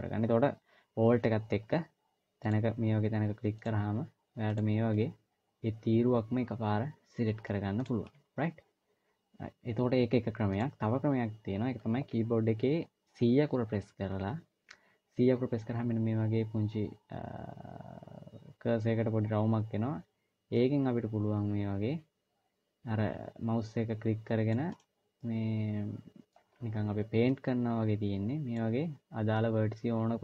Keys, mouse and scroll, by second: 0.0-0.4 scroll up 1, 2.2 alt+click, 7.7 alt+click, 10.2 click, 25.0 middle click, 26.3 c.